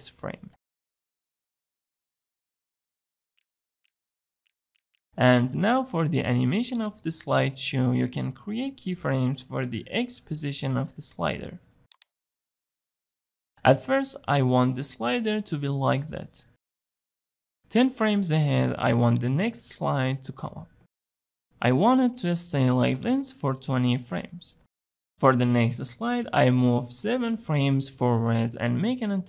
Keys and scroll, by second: 17.9 shift+Page_Down, 23.1 ctrl+c, 24.2 ctrl+v, 27.1 Page_Down.